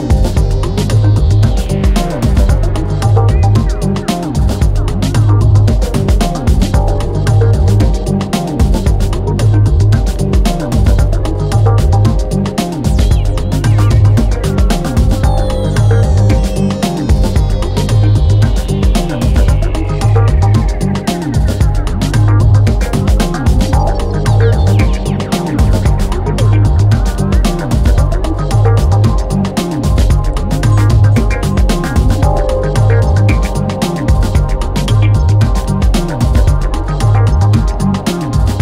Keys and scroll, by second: 8.7 Delete, 10.4 ], 11.7 ], 13.7 4, 18.8 F1, 19.2 F2, 19.3 ctrl+d, 19.4 Escape, 27.0 ctrl+d, 27.0 Escape, 33.6 3, 34.2 ctrl+d, 34.3 Escape, 35.8 4, 36.3 3, 37.4 4.